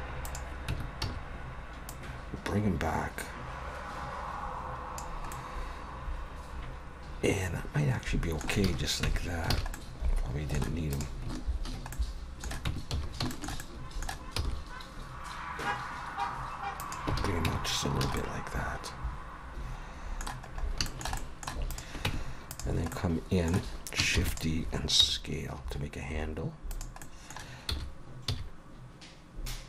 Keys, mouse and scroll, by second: 0.2 click, 0.7 Tab, 1.0 a, 1.9 click, 5.3 middle click, 8.8 alt+a, 9.0 Tab, 9.5 alt+a, 9.7 middle click, 10.9 click, 11.9 middle click, 12.7 Tab, 12.9 a, 13.3 shift+middle click, 13.6 middle click, 14.4 e, 17.2 alt+a, 17.4 Tab, 18.0 alt+a, 18.2 middle click, 20.5 scroll up 2, 20.8 shift+middle click, 21.2 middle click, 21.7 click, 22.1 Tab, 22.5 click, 22.9 middle click, 24.1 shift+d, 25.0 s, 27.0 middle click, 27.7 s.